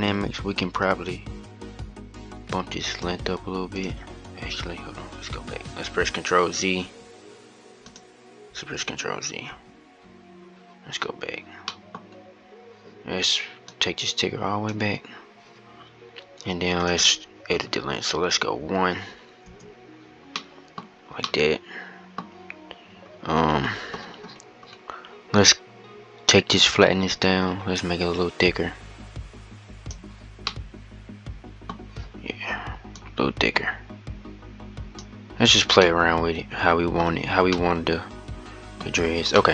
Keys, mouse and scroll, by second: 0.6-7.0 drag, 8.7 ctrl+z, 10.0 ctrl+z, 11.4-12.0 middle drag, 12.0-13.6 scroll up 2, 13.6-16.4 drag, 17.3-20.1 drag, 20.1-22.8 middle drag, 22.8-25.8 scroll down 44, 25.8-26.5 scroll down 9, 26.5-29.6 drag, 30.2-31.5 middle drag, 31.5-32.7 scroll up 1, 32.7-35.6 drag, 35.6-38.6 middle drag, 38.6-39.1 scroll down 3, 39.1-39.5 middle drag.